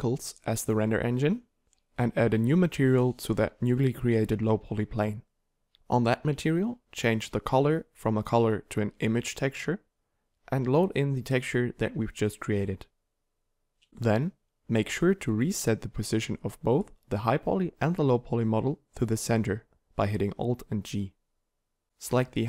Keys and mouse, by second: 1.6-3.1 drag, 21.9 alt+g.